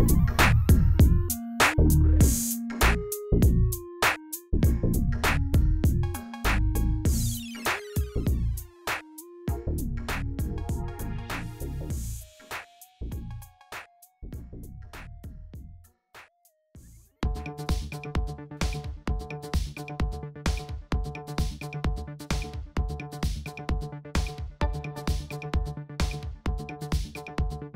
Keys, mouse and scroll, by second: 0.1 click, 1.2 Tab, 1.8 r, 4.8 click, 5.2 scroll up 2, 5.6 click, 6.4-7.8 drag, 8.5 click, 8.9 click, 9.5 click, 10.0 click, 10.3 scroll down 2, 11.2 drag, 11.6 g, 13.9 click, 14.4 click, 15.5-18.4 drag, 18.6 click, 19.5 click, 20.9 click, 21.6 click, 21.9 click, 22.6 click, 23.4-23.8 drag, 26.3-27.7 drag.